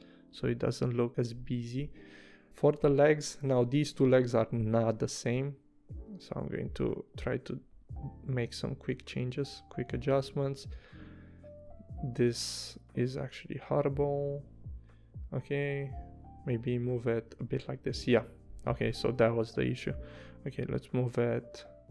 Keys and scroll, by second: 1.1 v, 4.0 a, 14.9 v.